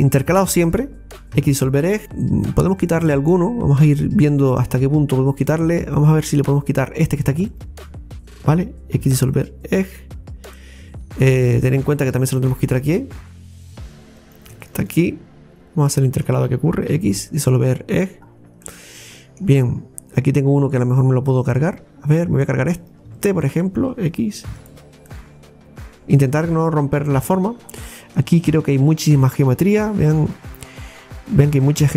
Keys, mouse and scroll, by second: 0.3 alt+shift+right click, 1.4 x, 2.0-3.1 shift+middle drag, 3.1-3.9 scroll up 1, 3.9-5.9 middle drag, 5.9 right click, 7.0 right click, 7.3 alt+shift+right click, 7.5 alt+shift+right click, 9.0 x, 10.1-10.4 scroll down 2, 10.6-13.6 middle drag, 14.2 right click, 14.6 alt+shift+right click, 15.5 scroll down 1, 15.9 alt+shift+right click, 16.9 x, 18.2-18.5 scroll down 3, 18.7 middle click, 19.7 scroll up 2, 21.4 right click, 22.8 right click, 23.4 alt+shift+right click, 24.5 x, 25.1-27.6 middle drag, 27.6-28.0 scroll up 2, 28.0-29.1 middle drag, 29.1 scroll up 2, 30.2 scroll down 1, 31.3 right click, 31.6 right click, 31.8 alt+shift+right click.